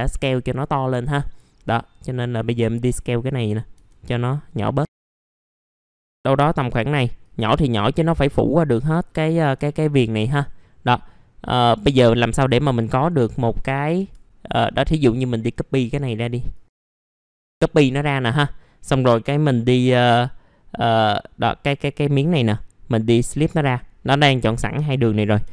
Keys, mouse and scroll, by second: 0.8-1.2 scroll up 1, 1.2 middle click, 2.0-3.5 drag, 3.5 scroll up 1, 4.9 click, 5.5 r, 5.7 click, 6.6 w, 7.2-9.2 drag, 9.6 alt+middle click, 10.3 scroll down 1, 10.9 middle click, 12.0 scroll up 1, 13.2 click, 13.9 F4, 14.5 middle click, 14.5 scroll down 1, 15.2 middle click, 15.4-15.7 scroll down 1, 16.5 shift+click, 18.6 middle click, 19.5-20.1 scroll up 2, 22.4 right click, 23.4 click, 25.4 5.